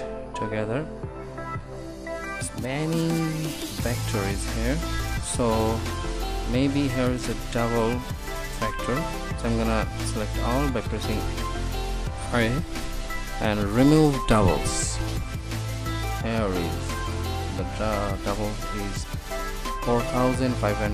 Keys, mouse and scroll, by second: 0.0 Tab, 11.1 a, 15.3-18.9 drag, 18.9-20.9 middle drag.